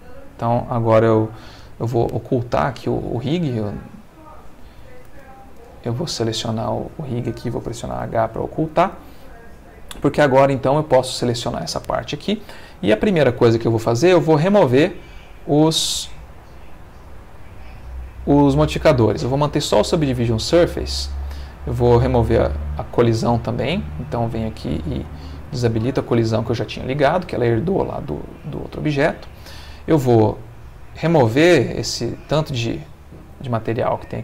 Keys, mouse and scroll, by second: 0.1 click, 0.7 click, 2.7 click, 5.1 ctrl+Tab, 7.9 h, 8.7 click, 9.4 click, 10.2-11.9 middle drag, 14.5 click, 24.3 click, 26.1 click, 27.0-29.1 middle drag, 29.7 click, 31.2-32.4 drag, 33.2-34.2 middle drag.